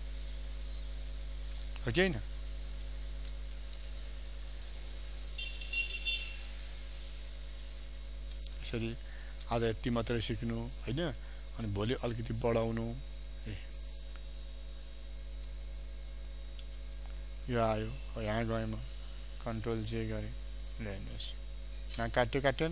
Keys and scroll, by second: 14.6 ctrl+j, 16.7 ctrl+alt+z, 19.5 ctrl+j, 22.6 ctrl+0.